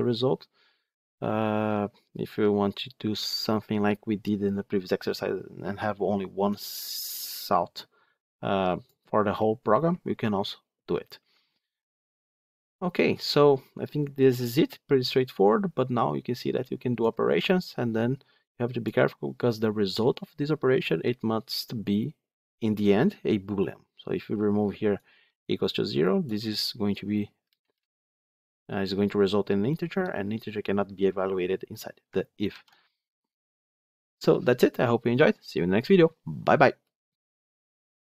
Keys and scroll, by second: 32.4 ctrl+z.